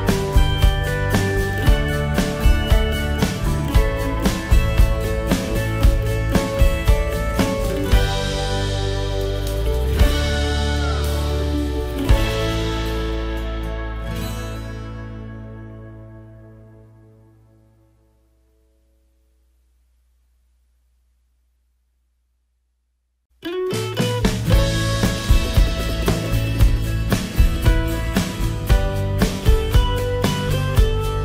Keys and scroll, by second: 16.2 F10, 21.8 ctrl+t.